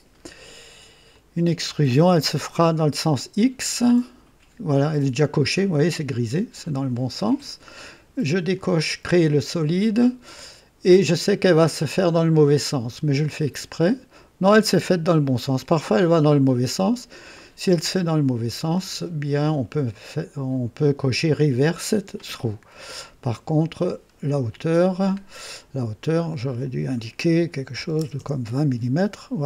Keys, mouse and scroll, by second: 1.1-1.8 drag, 8.5 click, 11.1-12.0 drag, 12.8 click, 13.8-15.2 drag, 17.9 click, 18.6 scroll down 2, 23.8 scroll up 2, 26.2 click, 27.7 KP_2, 27.9 KP_0, 28.1 Return.